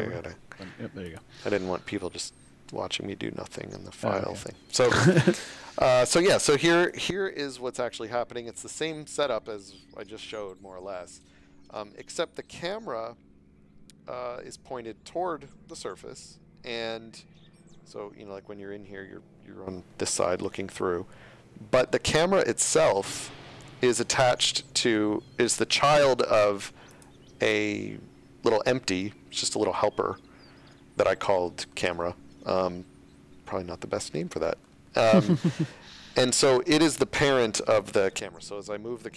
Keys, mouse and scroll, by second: 2.1 middle click, 5.1 shift+middle click, 6.7 click, 7.5 scroll down 1, 7.8 shift+middle click, 8.8 middle click, 11.0 shift+middle click, 16.9 middle click, 26.9 click, 27.9 middle click, 32.0 shift+middle click, 32.7 middle click, 34.9 shift+middle click, 37.2 g, 38.5 right click.